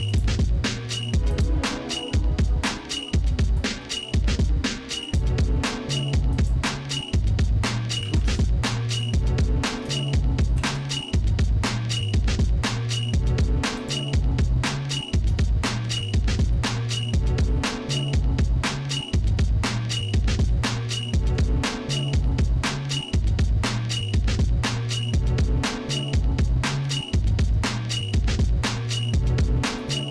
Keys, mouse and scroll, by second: 0.1 click, 1.4-5.3 drag, 6.5 click, 8.1 ctrl+z, 9.2 shift+middle click, 10.6 ctrl+i, 13.9 click, 15.4 shift+middle click, 15.9 Tab, 16.6-19.0 shift+middle drag, 19.4-21.4 shift+middle drag, 23.3-23.8 scroll down 2, 23.8-26.9 shift+middle drag, 27.2 scroll up 2, 27.7 shift+middle click, 28.4 middle click, 29.1 shift+middle click, 29.9 middle click.